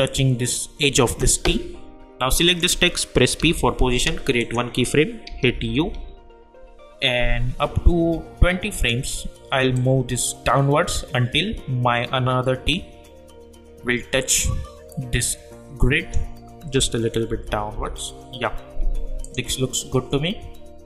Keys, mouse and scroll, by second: 2.4 click, 3.4 p, 4.4 click, 5.2 =, 5.4 =, 5.8 =, 8.7-16.7 drag, 16.7 Down, 19.2 click.